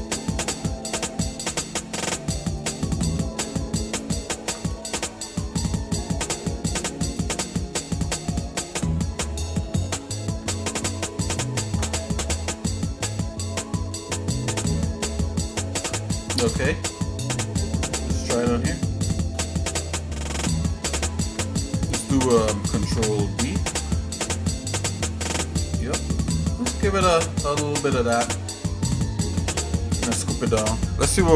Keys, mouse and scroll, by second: 0.5-1.2 scroll up 3, 2.6 shift+click, 4.0 ctrl+click, 4.8 shift+middle click, 5.5 middle click, 7.0 ctrl+click, 7.8 scroll down 1, 8.4 scroll down 1, 8.9 shift+middle click, 9.7 middle click, 11.2 ctrl+click, 12.0 middle click, 12.7 scroll down 1, 13.5 shift+middle click, 15.4 ctrl+click, 16.1 middle click, 16.4-16.9 scroll down 3, 17.1 shift+middle click, 17.9-18.7 scroll up 4, 18.8 shift+middle click, 23.7 ctrl+b, 28.3 click, 28.7 shift+middle click, 29.5 middle click.